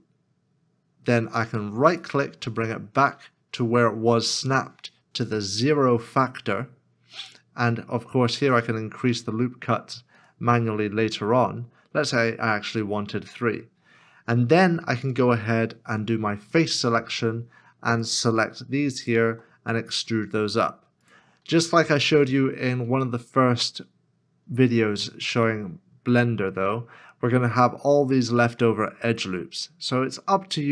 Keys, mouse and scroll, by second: 1.9 scroll up 1, 1.9 right click, 16.4 3, 19.0 shift+click, 19.9 e, 23.0 middle click.